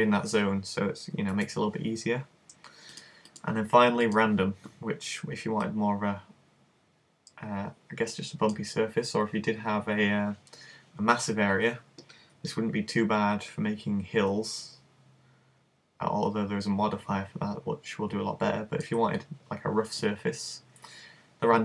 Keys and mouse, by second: 1.4 super+z, 3.0 click, 12.7 middle click.